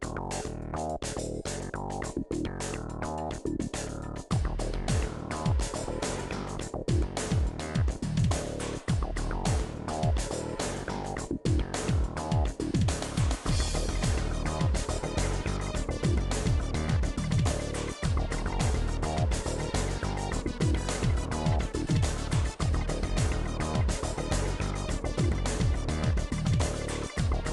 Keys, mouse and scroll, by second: 0.0-0.4 scroll up 2, 0.4 click, 0.6 shift+middle click, 0.8 shift+click, 1.2 right click, 1.5-2.7 drag, 2.7 middle click, 3.5 shift+click, 3.9 right click, 4.2 click, 5.1 middle click, 6.0 shift+click, 6.7-9.9 typing, 6.9 shift+click, 7.4 shift+click, 7.8 shift+click, 8.3 middle click, 8.7 shift+click, 9.0 middle click, 9.2 shift+click, 9.7 click, 10.3 ctrl+z, 10.5 shift+click, 10.9 f, 11.0 middle click, 11.3 shift+click, 11.6 f, 11.7 middle click, 12.9 KP_1, 13.6 click, 14.3 g, 15.1 click, 15.7 g, 16.4 click, 16.8 g, 17.7 g, 18.4 click, 18.7 g, 19.1 click, 19.4 g, 20.6 middle click, 20.8 scroll down 3, 21.0-23.2 middle drag, 23.2 KP_1, 23.7 click, 24.2 g, 25.0 middle click, 25.2 scroll down 1, 25.3 middle click, 26.2 click, 26.7-27.5 middle drag.